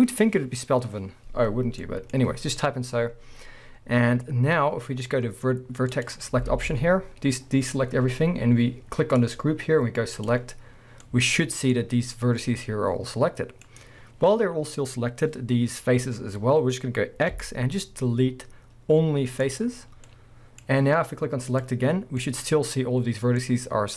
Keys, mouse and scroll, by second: 5.9 middle click, 6.0 click, 6.5 alt+a, 9.2 click, 10.2 click, 11.0-13.5 middle drag, 17.3 x, 20.1 middle click, 21.5-22.2 drag, 22.2 middle click, 23.2 scroll down 2, 23.4 middle click.